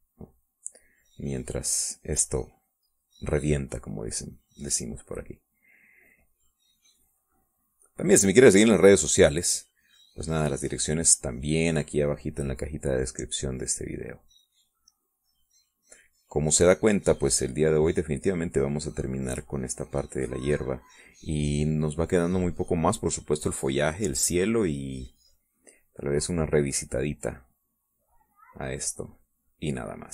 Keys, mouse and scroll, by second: 4.4-7.2 drag, 10.6-15.3 drag, 15.5 middle click, 16.2-21.0 drag, 21.2-22.6 drag, 22.8 middle click, 23.6 middle click, 25.2 middle click, 26.5-30.1 drag.